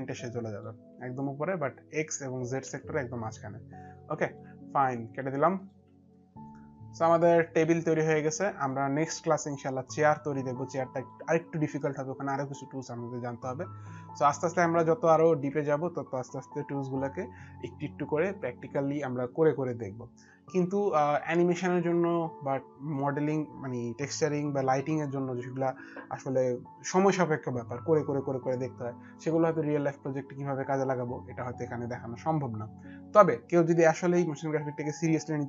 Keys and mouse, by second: 0.2 click, 2.6 alt+click, 5.4 alt+click, 5.8 alt+click, 9.0 alt+click, 9.1 alt+click, 12.6 alt+click, 14.6 alt+middle click.